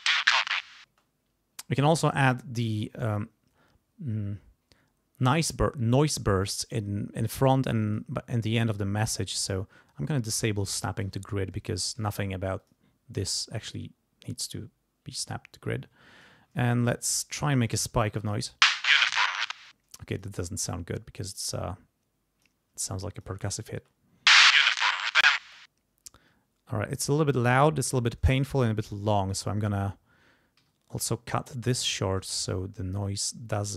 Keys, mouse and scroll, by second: 0.8 space, 7.9 click, 10.3 click, 11.2 ctrl+scroll up 2, 12.0 ctrl+click, 12.6 click, 13.2-16.4 drag, 16.7-17.1 ctrl+shift+scroll down 3, 17.5 ctrl+click, 18.1 space, 19.2 ctrl+scroll up 2, 19.5 ctrl+space, 20.1 ctrl+click, 20.7-22.6 drag, 23.0 click, 23.7 space, 25.4 space, 27.1 click, 28.5 click, 30.6 g, 31.0-32.6 drag, 33.2 click.